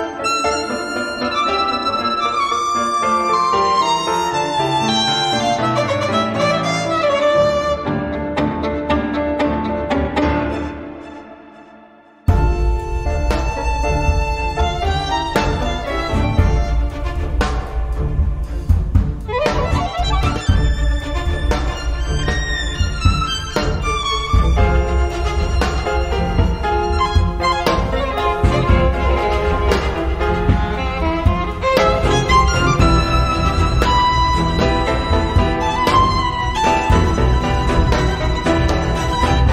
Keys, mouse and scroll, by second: 1.3 click, 1.7 click, 3.1 0, 3.9-4.2 scroll down 2, 5.2 click, 5.9 click, 11.6 click, 12.8 click, 13.4-15.0 typing, 15.3-16.6 drag, 17.0 click, 17.9 click, 19.3-20.6 drag, 21.0 click, 22.3 click, 23.0 click, 24.2-25.5 drag, 25.7 click, 26.3 click, 27.1 1, 27.3 2, 28.3-28.7 scroll up 2, 29.8 click, 31.3 click, 32.6 5, 33.9-35.0 drag, 35.5 1, 35.8 2, 36.7-38.0 drag, 38.4 click, 38.9 click, 39.3 middle click.